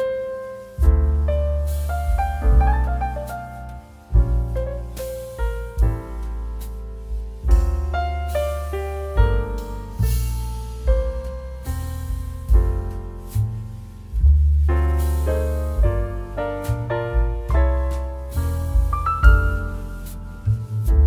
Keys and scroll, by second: 0.6 ctrl+g, 10.2 ctrl+g, 14.4 ctrl+d.